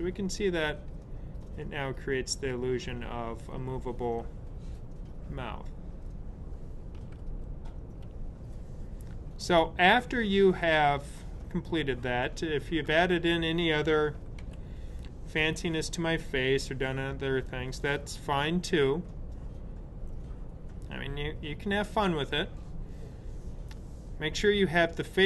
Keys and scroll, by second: 7.1 super+z, 14.3 super+0.